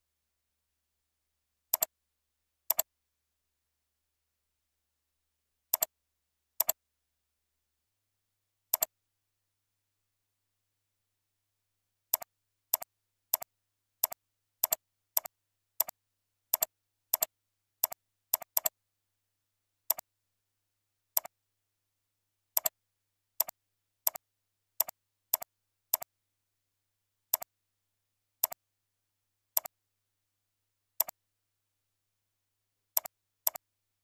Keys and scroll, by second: 22.8 ctrl+a, 25.8 ctrl+c, 26.1 ctrl+a, 26.7 ctrl+v.